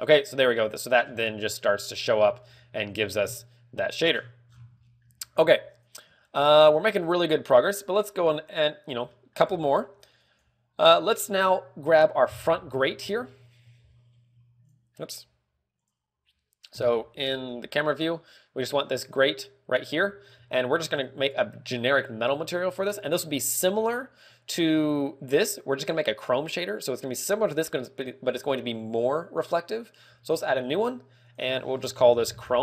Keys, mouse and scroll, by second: 1.5 scroll down 3, 2.4 scroll down 7, 2.9 shift+middle click, 3.8 KP_0, 4.9 scroll down 9, 5.4 shift+middle click, 5.7 scroll up 4, 6.1 ctrl+w, 6.7 shift+middle click, 16.3 click, 17.3 KP_0, 17.7 z, 17.9-18.8 scroll up 4, 19.8 right click, 20.5 z, 20.9 z, 31.0 click, 31.8 click.